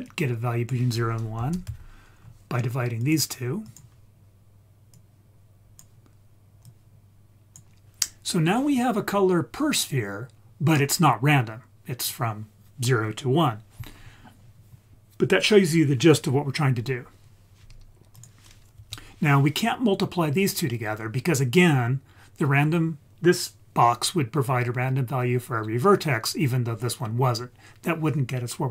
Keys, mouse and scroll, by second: 0.0-3.1 drag, 3.7 click, 4.9 click, 6.7-7.6 drag, 18.2 click, 18.8 x.